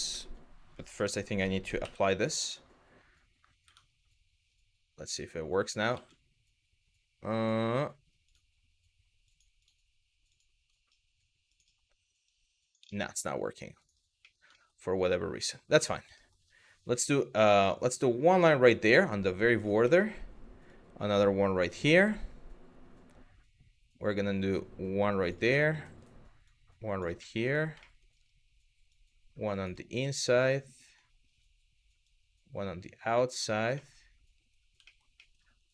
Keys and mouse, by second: 0.6 Tab, 1.5 ctrl+a, 3.3 Tab, 4.7 click, 5.6 ctrl+z, 6.9 click, 7.9 click, 8.9 click, 9.2 click, 9.9 click, 11.1 click, 11.9 click, 14.2 shift+middle click, 15.1 middle click, 15.9 shift+middle click, 17.5 click, 19.6 middle click, 20.3 click, 21.6 middle click, 24.2 click, 25.3 middle click, 26.1 click, 26.8 middle click, 27.5 shift+middle click, 28.5 click, 29.6 middle click, 31.7 click, 33.5 middle click, 34.6 shift+middle click, 34.9 middle click, 35.4 click.